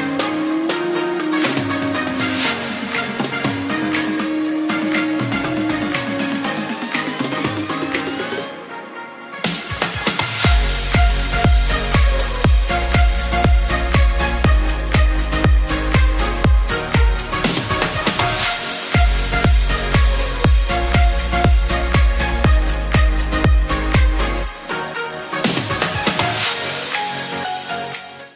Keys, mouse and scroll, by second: 8.2 7, 8.3 0, 8.4 Return, 12.4 r, 14.1 r, 14.4 x, 18.6 r, 18.8 y, 21.4 ctrl+z, 21.5 ctrl+z.